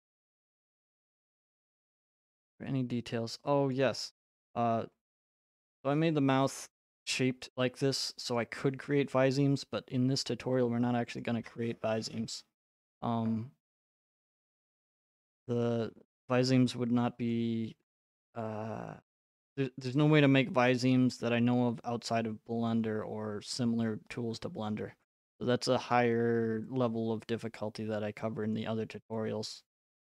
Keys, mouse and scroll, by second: 0.9 right click, 1.7 middle click, 1.9 middle click, 3.7 right click, 4.0 middle click, 4.0 middle click, 5.7 middle click, 6.9-7.4 scroll, 8.4 right click, 9.7 scroll, 13.6 click, 14.6 right click, 17.3 click, 17.9 click, 18.4 middle click, 18.5 middle click, 19.8 right click, 24.1 click, 24.3-25.0 scroll, 25.9 right click, 25.9-26.8 scroll, 28.5 click, 28.8 middle click, 28.8 middle click, 29.6 middle click, 29.6 right click.